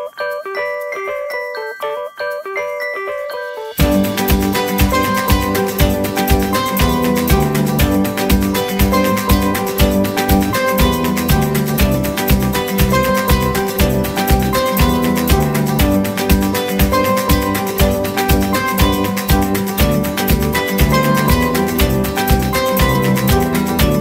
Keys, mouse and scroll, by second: 0.7 scroll up 1, 1.3 middle click, 3.6 double click, 4.5 right click, 7.5-9.3 typing, 11.6 middle click, 14.6 scroll up 1.